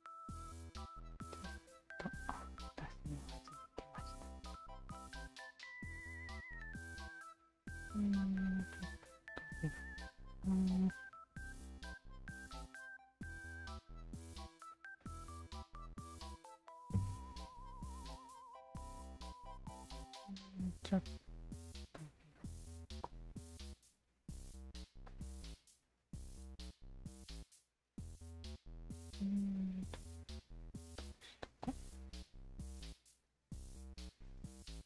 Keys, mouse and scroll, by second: 0.5-1.8 alt+drag, 2.4-4.1 alt+drag, 4.8 alt+click, 5.7 alt+click, 6.1 alt+click, 6.7 alt+click, 7.6-8.8 alt+drag, 9.0 alt+click, 10.5 alt+click, 11.2 alt+click, 12.1 click, 13.4 alt+click, 14.7 alt+click, 15.0-19.2 alt+drag, 19.5 alt+click, 20.8 r, 21.6 alt+click, 22.9 w, 23.5 click, 24.6 click, 25.1-26.5 alt+drag, 26.9 alt+right click, 27.4 alt+right click, 28.8-29.9 alt+drag, 30.9 alt+click, 32.1 alt+click, 32.6 alt+right click, 33.0 alt+right click, 33.3-34.8 alt+drag.